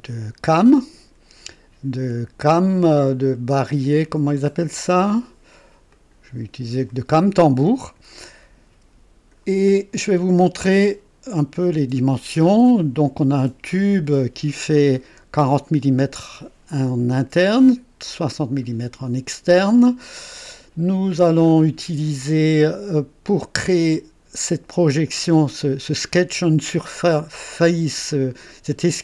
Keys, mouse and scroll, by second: 0.8-3.0 drag, 3.8 click, 4.7 click, 5.9 click, 6.9 click, 8.2-9.5 drag, 13.7 click, 14.9-15.6 right drag, 19.2 click, 23.4-24.1 drag, 27.0-28.3 drag.